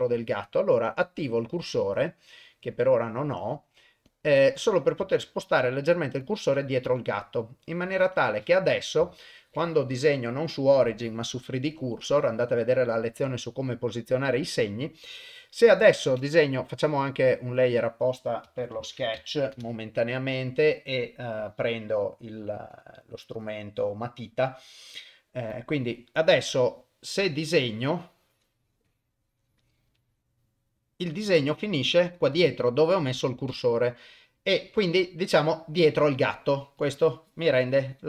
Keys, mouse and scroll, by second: 1.3 click, 2.5-5.0 drag, 5.2 shift+right click, 6.9 KP_1, 8.0 KP_0, 9.1 shift+middle click, 9.9-12.2 drag, 16.7 click, 22.7-26.4 drag, 28.0-30.6 drag, 30.6-31.6 middle drag, 32.2 middle click, 33.0 middle click, 34.8 KP_0, 36.8-38.0 drag.